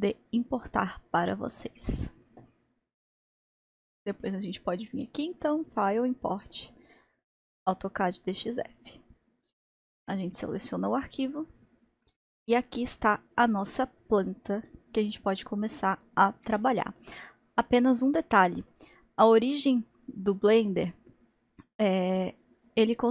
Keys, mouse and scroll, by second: 3.7 click, 8.1-8.8 drag, 12.5-15.7 middle drag, 15.7-16.3 scroll up 1, 16.3 scroll up 1, 16.5-17.2 shift+middle drag, 17.2-17.7 scroll up 1, 17.7-22.3 middle drag.